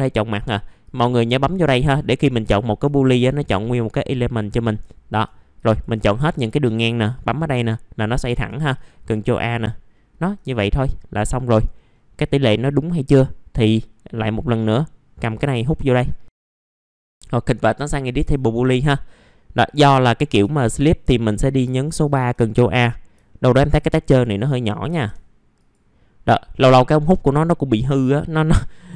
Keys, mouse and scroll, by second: 3.1 ctrl+click, 3.8 ctrl+click, 5.5 ctrl+click, 7.1 click, 8.7-9.7 drag, 9.9 middle click, 11.4 click, 11.9-12.6 scroll down 1, 12.6 alt+middle click, 13.2 scroll up 1, 14.5 click, 16.3 scroll up 1, 16.5 scroll down 1, 16.5 alt+middle click, 17.5 ctrl+shift+g, 18.3 ctrl+shift+g, 18.3-19.7 scroll up 1, 19.7 scroll up 2, 21.0 middle click, 21.1-21.6 scroll down 1, 21.7 alt+middle click, 22.3-23.1 scroll up 1, 23.2 alt+middle click, 23.8 middle click, 24.8 1, 25.5 click.